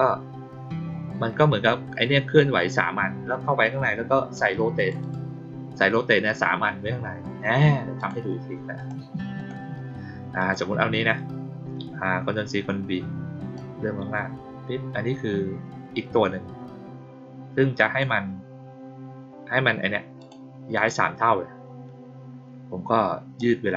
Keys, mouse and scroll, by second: 4.7 click, 4.9 click, 7.9 click, 8.7 click, 9.3 click, 10.3 click, 13.5-17.9 drag, 20.1 click, 20.7 click, 23.3 click.